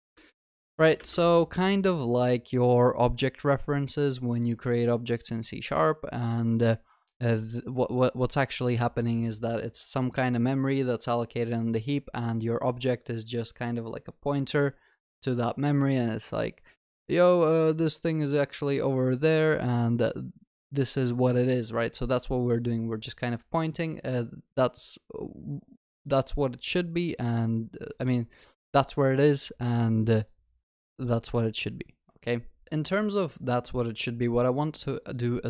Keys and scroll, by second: 1.3 ctrl+s.